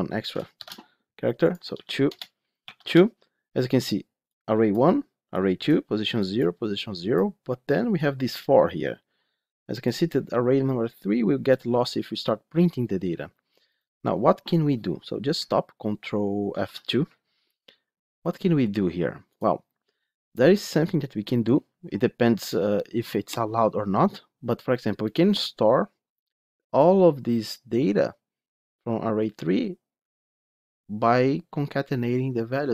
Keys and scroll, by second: 0.4 ctrl+shift+F10, 16.5 ctrl+F2.